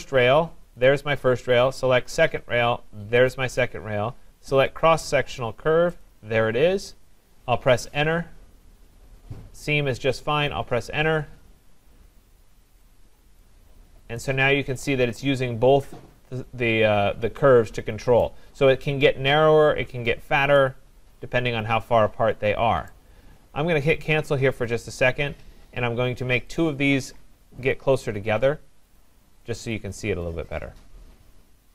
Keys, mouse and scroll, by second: 0.9 click, 3.3 click, 6.0 click, 7.8 Return, 10.3 Return, 13.4 click, 13.8-14.1 scroll, 18.2 right click, 18.6 scroll, 20.1 scroll, 22.9 right click, 25.0 click, 26.6 click, 27.7 click, 29.0 click.